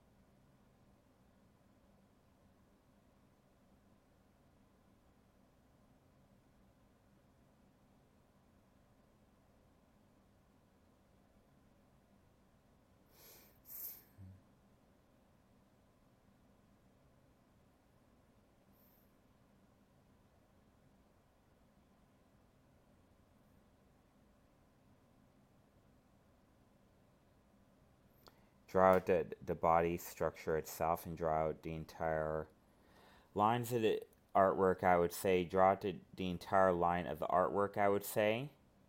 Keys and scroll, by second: 7.1 ctrl+z, 8.1 ctrl+z, 14.1 ctrl+z, 15.3 ctrl+z, 16.5 ctrl+z, 19.3 ctrl+z, 21.4 ctrl+z, 31.1 alt+space, 32.5 ctrl+z, 34.3 alt+space, 37.7 ctrl+z.